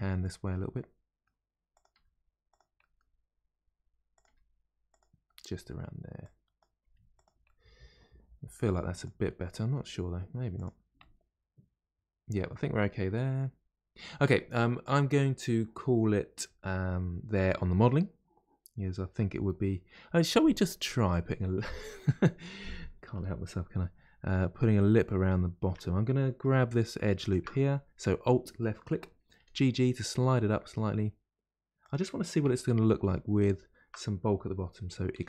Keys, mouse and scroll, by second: 0.5-1.7 middle drag, 1.7 click, 1.9 g, 2.7-4.1 middle drag, 4.1 click, 4.2 g, 5.3 middle click, 6.2 click, 6.8 g, 7.4-8.9 middle drag, 8.9 click, 9.2 middle click, 10.0 g, 10.9-12.6 middle drag, 12.6-13.0 scroll down 2, 13.0-16.0 middle drag, 16.4-19.5 middle drag, 20.2-20.6 scroll up 1, 20.6-23.6 middle drag, 25.3-26.7 middle drag, 26.7 2, 27.2 alt+click, 29.3 g, 32.4 3, 33.3 alt+click, 35.1 e.